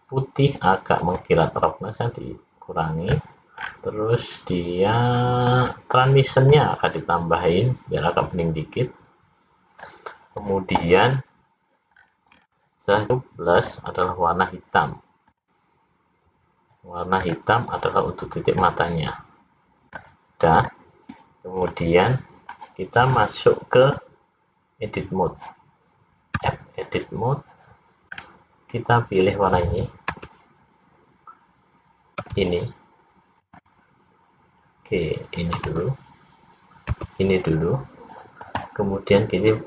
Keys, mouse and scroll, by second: 1.7 click, 3.7-4.8 scroll down 5, 5.7-6.1 scroll down 1, 6.6 click, 12.1-13.1 scroll up 9, 13.7 click, 15.3 click, 17.3 click, 20.6 click, 21.8 middle click, 23.2 click, 27.0 Tab, 28.3-29.5 scroll up 2, 30.8 l, 33.0 l, 34.3 click, 36.4 l, 37.5 l.